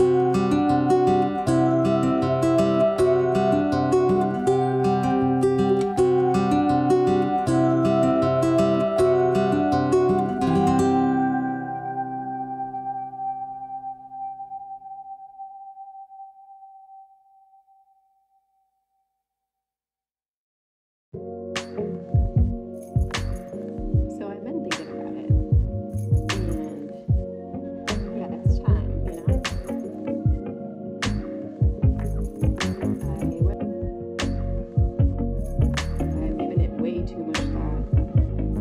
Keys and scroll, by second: 15.4 ctrl+z.